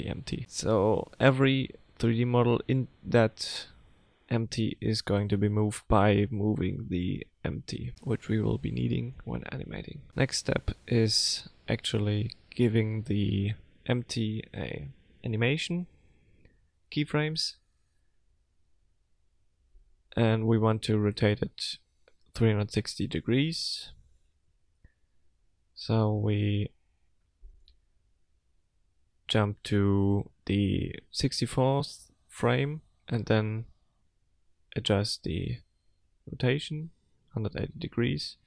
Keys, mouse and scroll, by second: 3.5 click, 5.1 r.